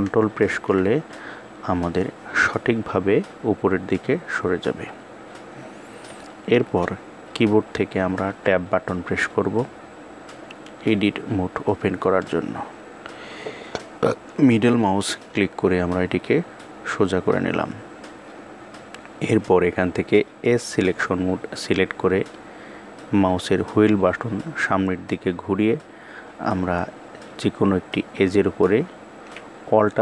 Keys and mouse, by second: 7.8 Tab, 11.7-14.4 middle drag, 19.9 click, 27.8 alt+click.